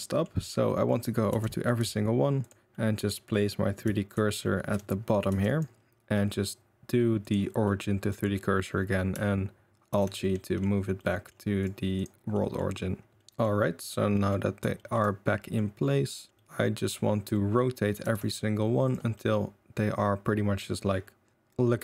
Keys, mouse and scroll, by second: 0.2-0.6 middle drag, 0.9-1.5 middle drag, 1.3 Tab, 1.6 middle click, 1.8 2, 2.4 click, 2.7-5.0 middle drag, 4.1 shift+s, 5.2 middle click, 5.3 Tab, 7.3 middle click, 8.2-9.1 middle drag, 9.9 alt+g, 10.2-10.6 middle drag, 10.9-11.3 middle drag, 11.6 click, 11.9 click, 12.3 middle drag, 13.1 Tab, 13.1 alt+g, 13.1 shift+s, 13.2 middle drag, 13.8-14.1 drag, 14.1 middle drag, 14.7 shift+middle drag, 15.4 middle click, 16.0 middle drag, 16.3-17.5 middle drag, 18.0 r, 19.1 middle drag, 19.2-19.7 drag, 20.4 drag, 20.6-21.8 middle drag.